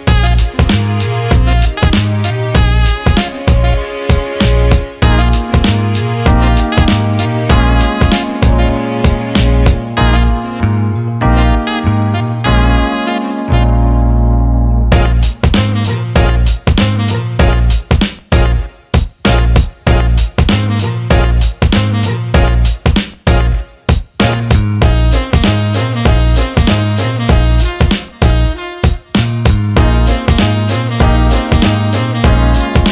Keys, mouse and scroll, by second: 0.6 ctrl+b, 7.8 alt+shift+click, 7.9 alt+shift+middle click, 8.7 Tab, 9.5-10.7 drag, 11.0 click, 11.4 alt+middle drag, 11.9 click, 13.4 click, 15.3 drag, 16.5-19.7 shift+drag, 21.2 click, 22.0 click, 25.8 click, 29.4-30.3 drag, 31.0-31.4 drag, 32.1-32.9 ctrl+z.